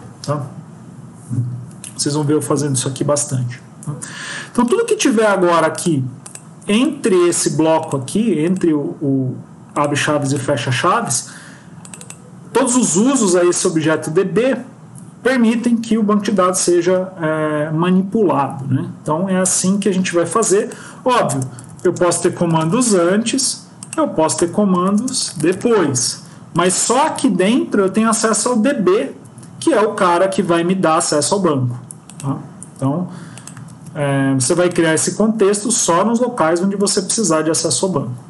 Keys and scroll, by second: 27.0 Tab, 29.0 Escape, 32.8 ctrl+x.